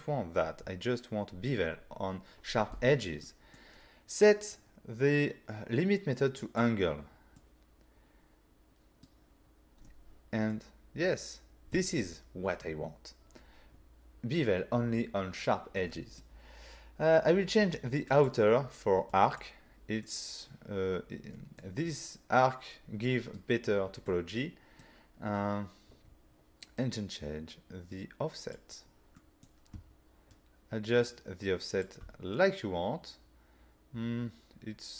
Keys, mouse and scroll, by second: 3.3 middle click, 4.5-4.9 scroll down 3, 6.5 click, 7.4 middle click, 10.5 middle click, 15.8 middle click, 18.1 click, 19.1 click, 20.1 middle click, 23.1 middle click, 24.1 middle click, 25.4 scroll up 3, 26.8 click, 26.8 scroll up 1, 29.2 middle click, 30.4 shift+click, 31.9 click, 32.4 middle click.